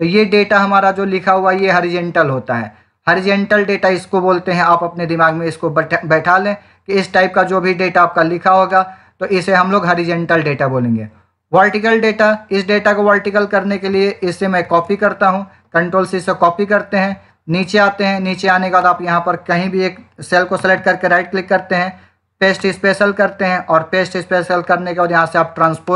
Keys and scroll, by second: 14.5 ctrl+c.